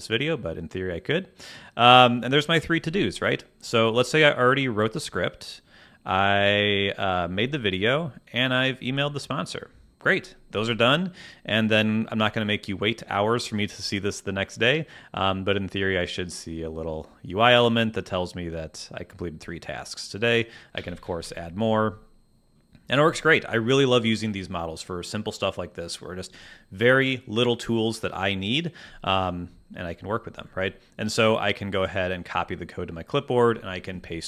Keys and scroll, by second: 21.1 t.